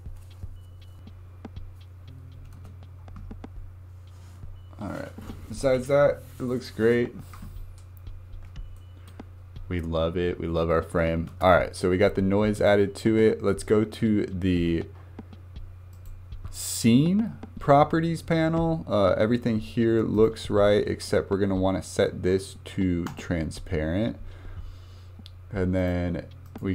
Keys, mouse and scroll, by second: 2.5 space, 3.5-3.8 scroll down 4, 8.2 scroll up 1, 8.8-11.3 shift+middle drag, 11.3 space, 12.6 click, 14.7-15.1 scroll down 7, 15.9 click, 20.2-23.3 drag, 25.8-26.7 drag.